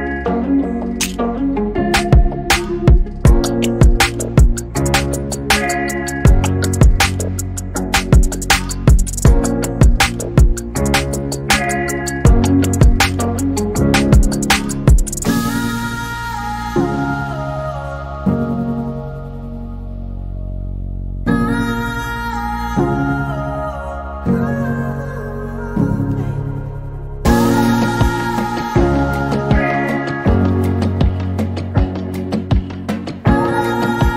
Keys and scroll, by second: 7.6-8.3 typing.